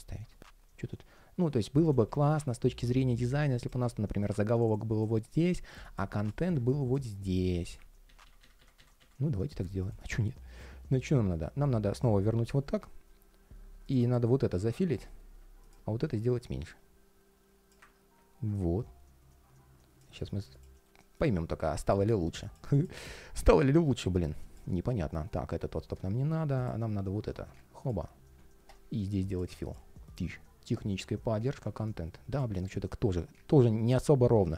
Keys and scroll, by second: 7.8 super+z, 20.5 ctrl+shift+4.